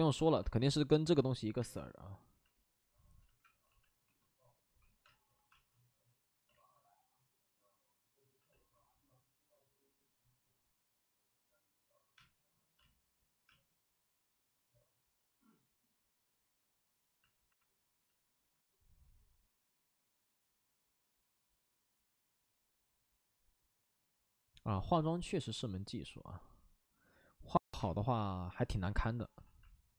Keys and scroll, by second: 0.1 c, 1.6 space, 3.2 ctrl+z, 3.6 b, 4.0 p, 5.0 space, 5.5 space, 6.4 ctrl+z, 8.3 c, 12.1 space, 12.7 space, 13.4 space, 27.7 space, 29.0 c, 29.4 c.